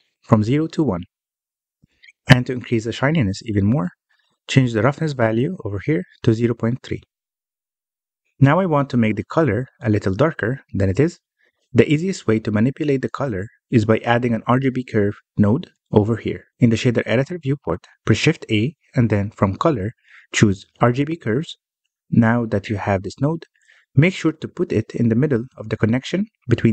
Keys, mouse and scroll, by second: 0.0-0.9 scroll up 1, 0.9-3.9 drag, 4.5-5.9 middle drag, 5.9-8.5 drag, 8.5-11.5 middle drag, 11.5 alt+a, 11.9-12.3 scroll down 1, 12.3-13.5 middle drag, 13.5-14.0 scroll down 7, 14.0-17.6 middle drag, 17.6-18.8 scroll up 1, 18.8 shift+a.